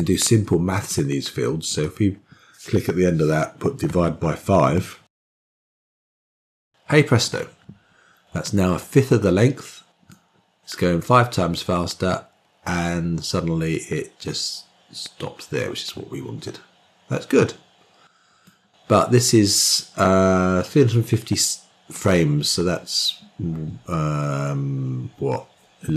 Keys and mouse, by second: 10.0-18.4 drag.